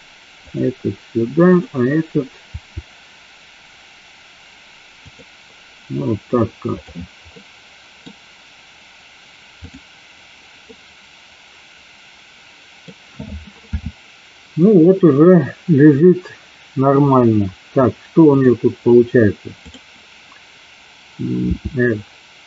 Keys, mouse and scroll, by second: 0.5 click, 1.5 click, 2.6 r, 5.1 click, 6.9 click, 7.4 middle click, 10.7-12.8 middle drag, 13.7 KP_7, 18.4 click, 19.6 click, 21.6 r.